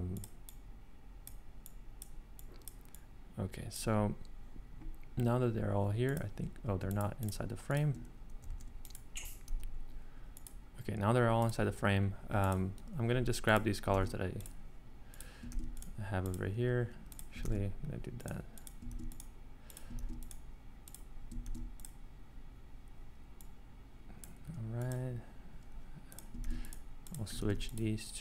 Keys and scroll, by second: 8.5 super+x, 9.5 super+v, 13.9 ctrl+c, 15.5 ctrl+c, 17.4 ctrl+c, 18.9 ctrl+c, 20.0 ctrl+c, 21.4 ctrl+c, 26.4 ctrl+c.